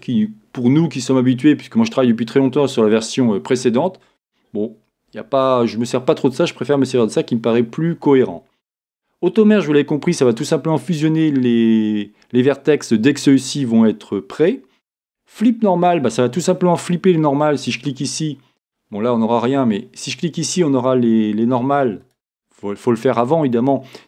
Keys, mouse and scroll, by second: 17.8 click, 18.7-22.1 middle drag, 22.1-24.0 drag.